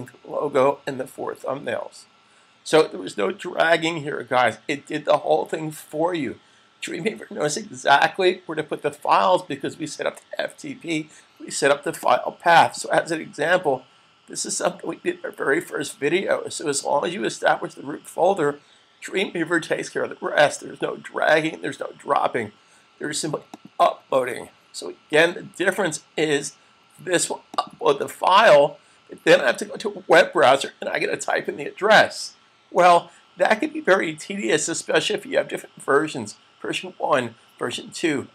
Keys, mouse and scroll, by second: 11.8 click, 23.7 click, 27.6 click.